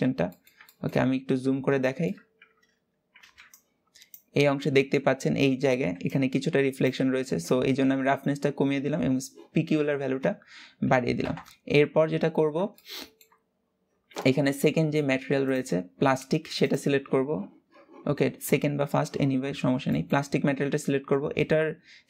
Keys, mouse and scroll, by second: 0.7 scroll up 3, 1.5-2.8 shift+middle drag, 2.8 ctrl+b, 10.9 KP_0, 12.4-14.3 shift+middle drag, 14.3-14.6 scroll up 6, 15.1 click, 15.6 scroll up 1, 16.3 click.